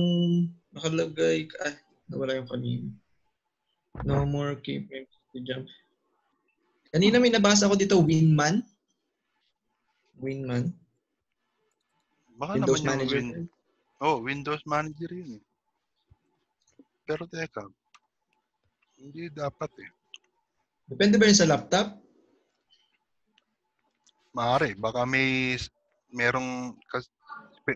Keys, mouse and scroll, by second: 14.9 click, 20.5 click.